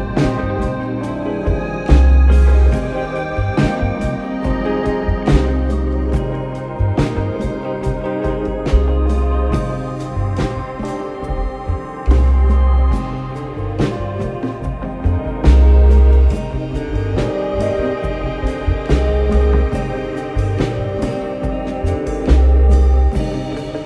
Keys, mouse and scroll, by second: 0.3-1.5 scroll down 1, 1.5 r, 5.5 s, 6.6-7.1 scroll up 8, 7.6 s, 9.4 click, 10.5 click, 11.0 scroll up 2, 11.9 scroll up 2, 12.0 click, 13.2-16.2 drag, 17.2 click, 19.2 click, 20.7 s, 23.1-23.8 drag.